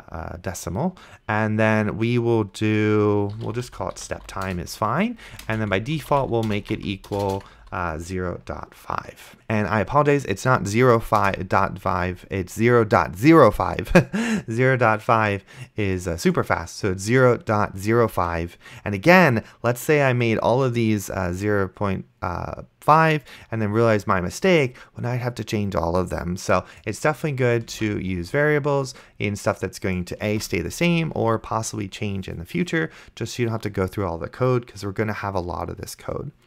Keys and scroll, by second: 3.1-8.1 typing, 11.5 KP_0, 28.0 ctrl+c, 30.6 ctrl+v.